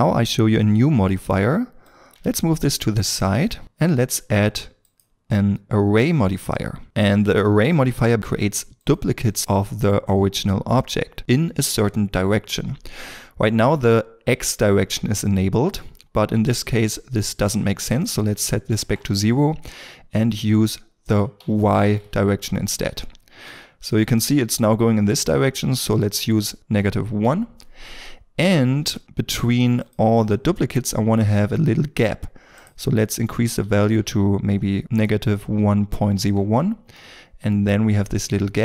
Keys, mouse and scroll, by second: 3.4 middle click, 9.2 double click, 18.3 KP_0, 18.8 Return, 21.4 KP_1, 21.8 Return, 23.5 middle click, 27.1 Return, 28.4 scroll up 1, 29.8 double click, 30.8 scroll, 30.9-31.2 scroll up 1, 33.0 double click, 36.2 Return, 37.0 middle click, 38.0-38.6 scroll.